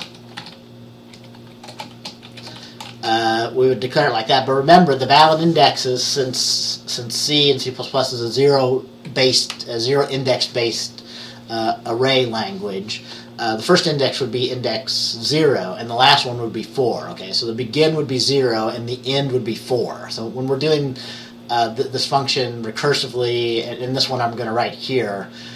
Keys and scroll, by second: 0.0-3.0 typing.